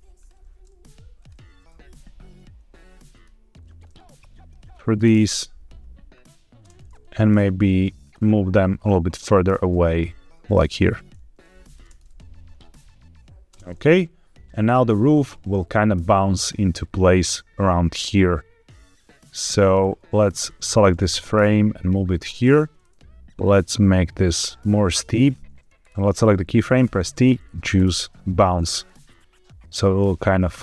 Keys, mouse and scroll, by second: 0.1 click, 1.1 click, 1.4 g, 1.6 x, 3.0 click, 4.0-4.5 drag, 4.6 click, 4.9 space, 6.5 space, 7.9 shift+click, 8.7 click, 9.4 g, 9.6 x, 10.7 click, 11.3 click, 13.4 space, 14.5 click, 15.4-19.7 drag, 20.2 click, 20.8 g, 21.0 x, 22.3 click, 23.2 click, 23.7 click, 25.7-26.7 drag, 26.7 t, 28.7-30.6 drag.